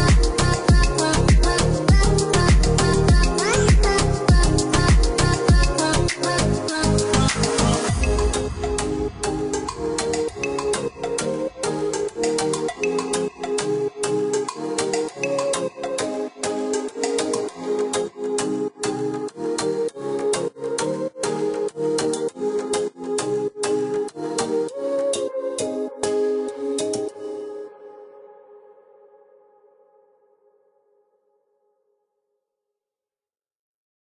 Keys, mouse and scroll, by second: 0.1 space, 1.0 click, 1.7 click, 3.7 middle click, 5.2 click, 8.4 click, 9.0 middle click, 10.6 click, 14.0 click, 14.6 middle click, 16.3 click, 17.9 space, 19.1 click, 19.8 click, 20.3-21.5 scroll up 1, 21.5 click, 24.4 click, 26.3 click, 30.0 click, 31.8 click, 33.1 Escape, 33.8 click.